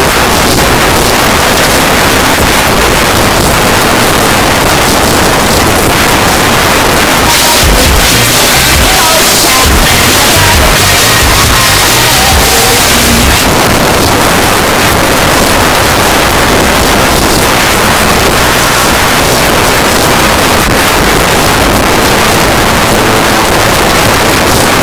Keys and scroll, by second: 1.0 s, 1.3 Down, 1.5 Down, 1.8 Return, 13.4 Page_Down.